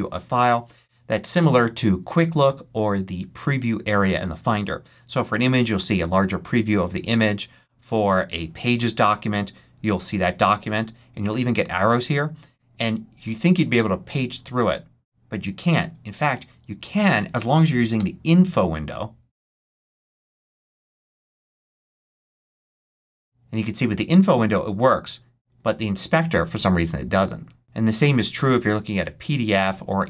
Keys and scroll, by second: 17.8 super+i.